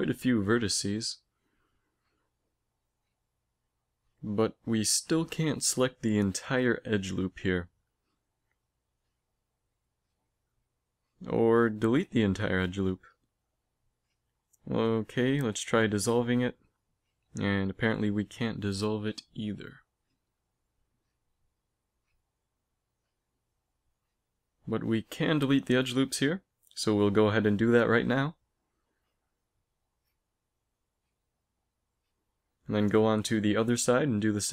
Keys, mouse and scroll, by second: 0.1 click, 0.3 click, 0.7 a, 1.2 z, 1.6 b, 2.8 z, 3.3 a, 3.7-6.3 right drag, 6.3 z, 8.7 a, 8.9 b, 10.0 x, 12.3 ctrl+z, 12.6 x, 15.3 x, 17.5 z, 18.2 ctrl+z, 19.3 middle click, 19.7 a, 22.2 middle click, 24.1-26.0 right drag, 24.7 x, 26.7-28.9 drag, 27.0 x, 28.9-30.1 middle drag, 28.9 a, 32.0 middle click, 32.2 middle click, 32.4 middle click, 34.3 middle click.